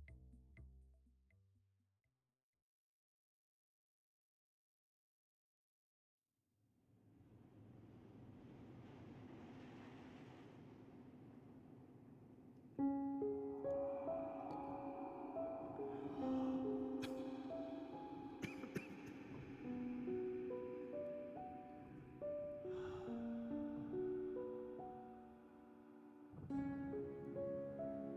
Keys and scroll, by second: 5.8-7.2 typing, 7.7 Return, 9.5 6, 10.3 Return, 13.3 Tab, 24.7 shift+z.